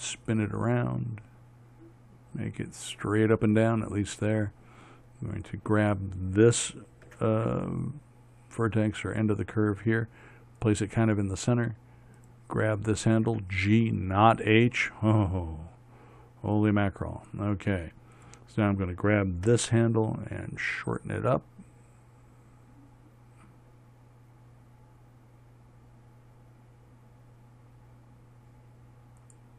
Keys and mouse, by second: 5.8-10.8 right drag, 7.6 g, 12.7-16.6 right drag, 13.8 g, 18.6-22.0 right drag, 20.0 g.